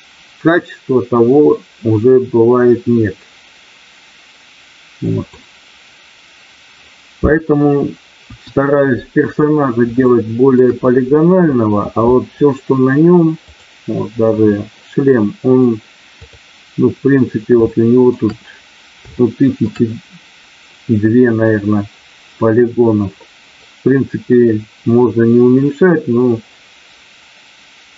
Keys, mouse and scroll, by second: 8.2 KP_1, 10.0 middle click, 13.3 click, 16.2 click, 17.7 shift+middle click, 19.1 shift+middle click.